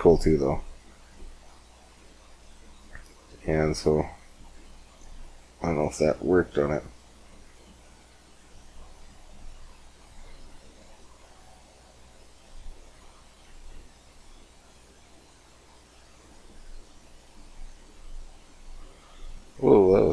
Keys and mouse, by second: 0.1 click, 4.3 click, 4.8-6.0 middle drag, 6.0 click, 6.1 middle click, 6.7-8.4 middle drag, 8.4-18.7 drag, 18.7 middle click.